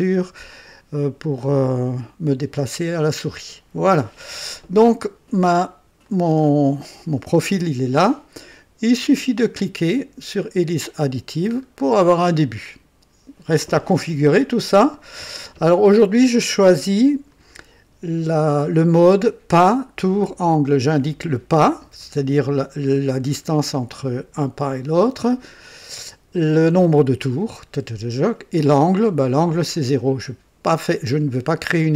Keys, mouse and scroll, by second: 3.0 click, 4.6-5.4 right drag, 5.6-5.9 scroll up 1, 6.1-6.8 right drag, 10.4 click, 11.5-12.3 scroll down 2, 12.6-13.3 right drag, 17.3 click.